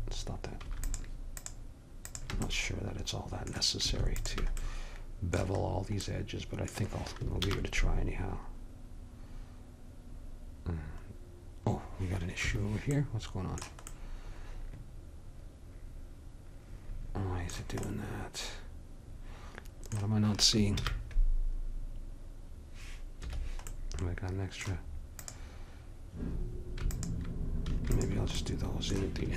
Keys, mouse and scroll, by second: 0.9-2.5 drag, 2.5 middle click, 3.3 click, 4.0 middle click, 4.3-6.2 drag, 6.2-7.5 middle drag, 7.5 ctrl+b, 13.1 middle click, 17.9-19.1 middle drag, 20.8 ctrl+b, 25.3-28.6 drag.